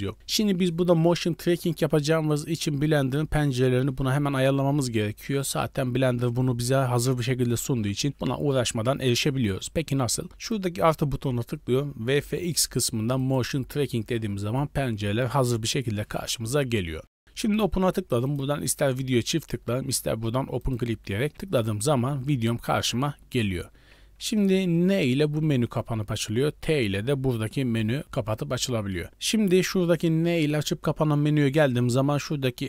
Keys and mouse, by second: 10.4 click.